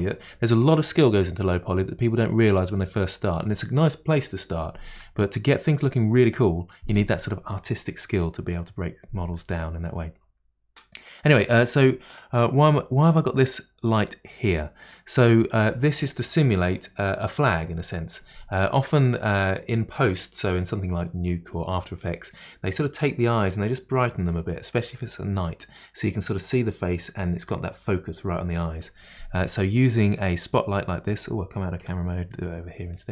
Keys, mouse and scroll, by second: 12.1 click, 30.2-31.9 middle drag, 31.9 KP_0, 32.5-33.1 middle drag.